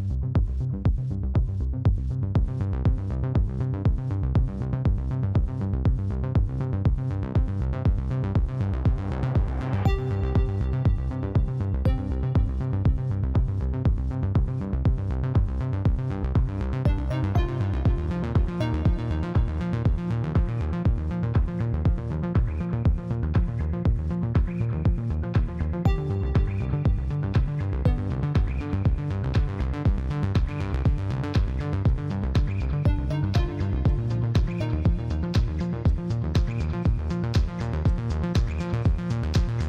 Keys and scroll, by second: 15.7 e, 37.1 ctrl+b.